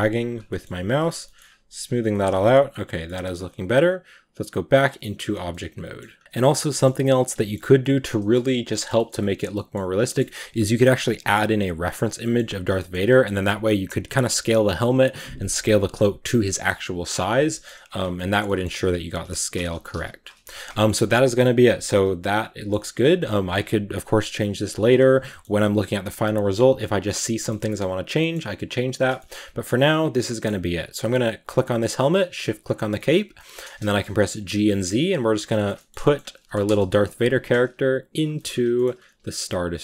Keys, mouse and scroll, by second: 0.3 middle click, 0.8 click, 1.1 shift+middle click, 1.3 click, 1.8 scroll down 3, 1.9 shift+middle click, 2.4 scroll down 1, 2.5 middle click, 2.9-4.6 scroll up 2, 4.6 click, 4.9 middle drag, 5.1 a, 5.2 scroll up 1, 5.4-6.0 middle drag, 6.0 scroll up 1, 6.2-6.7 shift+middle drag, 6.7-7.3 scroll up 1, 7.3-12.7 shift+middle drag, 12.7 scroll up 1, 12.9-15.5 middle drag, 15.5-17.3 scroll down 1, 17.3 scroll down 1, 17.4-18.7 shift+middle drag, 18.7 right click, 19.0 s, 19.7 g, 20.2 a, 20.3 scroll down 3, 20.5-21.0 middle drag, 21.0 scroll down 3, 21.2-22.5 middle drag, 22.5-23.0 scroll up 4, 23.0-24.9 right drag, 24.9 scroll down 2, 25.1-25.8 middle drag, 25.8 scroll up 2, 27.1-28.9 middle drag, 28.9 scroll down 1, 29.0 middle drag, 29.3 a, 29.6-31.3 middle drag, 31.3-32.5 right drag, 32.5 scroll down 1, 32.8-33.3 shift+middle drag, 33.3 shift+scroll down 2, 33.6-34.2 shift+middle drag, 34.2 g, 35.4-36.0 shift+middle drag, 36.0-36.5 scroll up 1, 36.5 KP_0, 37.2 g, 38.2 shift+middle click, 38.3 scroll up 2, 38.6 shift+middle click, 39.0 s.